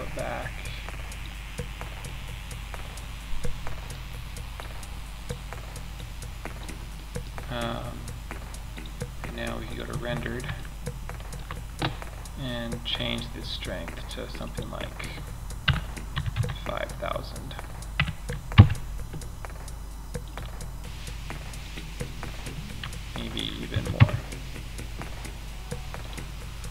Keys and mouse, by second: 2.8-3.3 middle drag, 3.8-6.3 drag, 6.3 middle drag.